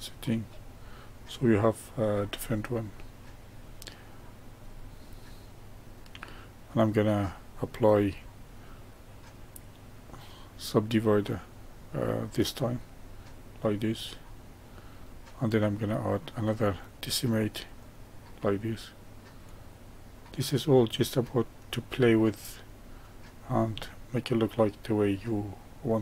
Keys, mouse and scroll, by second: 0.4-2.4 middle drag, 2.4-2.9 scroll down 1, 2.9-5.5 middle drag, 5.5-7.5 scroll up 1, 7.5-10.7 drag, 13.3-16.3 middle drag, 16.5-22.5 drag, 23.8-26.0 middle drag.